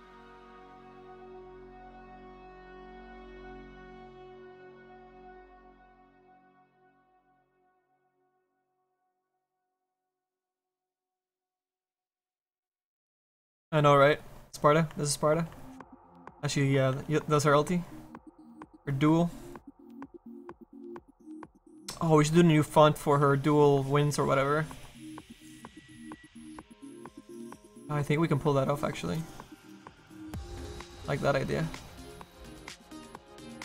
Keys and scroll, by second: 1.1 s.